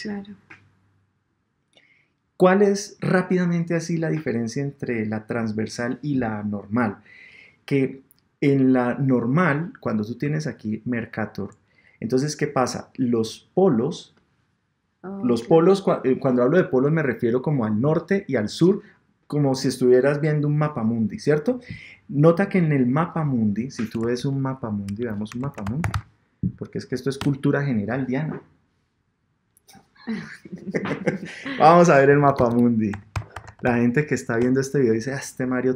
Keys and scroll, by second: 24.0 super+Tab, 27.2 Return, 34.4 Return.